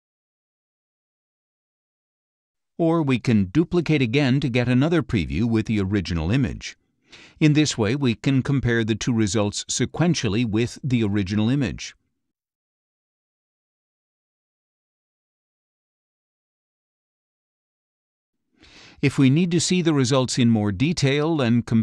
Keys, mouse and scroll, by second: 0.1 ctrl+shift+z, 0.8 ctrl+shift+z, 2.7-4.2 drag, 6.5 click, 7.9 click, 9.5 ctrl+Left, 10.2 ctrl+Left, 12.4 ctrl+shift+z, 13.6 ctrl+Right, 14.5 ctrl+Right, 15.4 ctrl+Left, 16.2 ctrl+Left, 16.9 ctrl+Right, 17.6 ctrl+Right, 19.2 ctrl+Left.